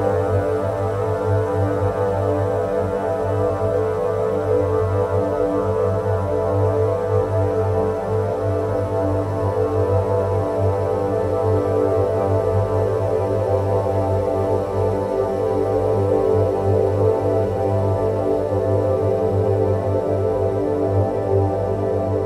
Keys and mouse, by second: 2.3-3.9 drag, 7.1-9.5 drag, 12.2-15.8 drag, 19.6 alt+h.